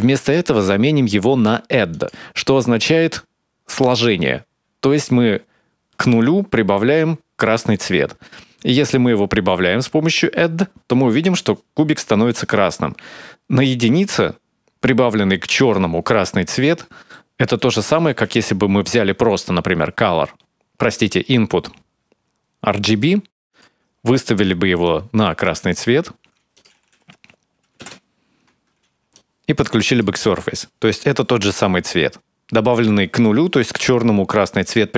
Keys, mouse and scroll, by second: 0.0 click, 8.7 click, 16.9 middle click, 17.8 shift+a, 23.9 click, 24.6 click, 25.2 click, 28.9 click.